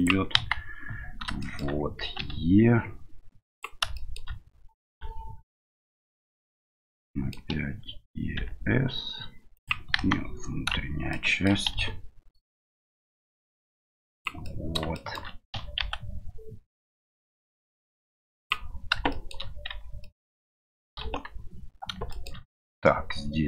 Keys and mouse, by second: 1.5 middle click, 4.0 middle click, 7.1 middle click, 11.1 middle click, 14.6 middle click, 15.0 shift+middle click, 19.1 shift+middle click, 19.7 Tab, 20.0 middle click, 21.0 KP_1, 22.1 shift+middle click.